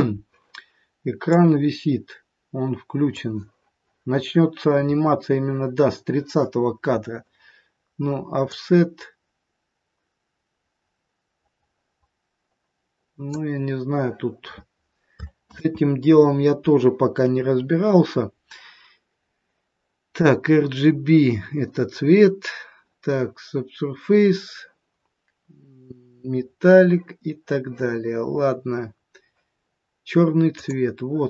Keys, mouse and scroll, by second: 1.3 click, 4.8-5.2 scroll up 3, 8.5 click, 15.5 ctrl+z, 23.4 scroll down 4, 24.9-28.0 scroll down 3, 28.0-30.5 scroll down 5, 30.5 click, 30.5-31.2 scroll down 4.